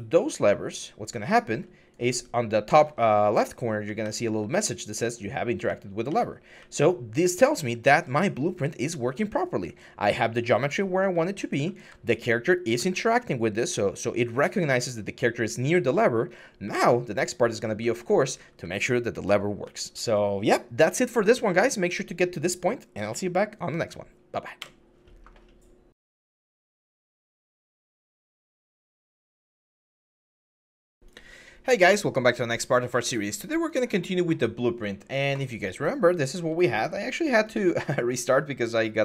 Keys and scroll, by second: 0.0-4.3 typing, 5.4-9.2 typing, 12.1-12.9 typing, 14.2-14.7 typing, 16.4-18.4 typing, 19.4 s, 24.4 Escape.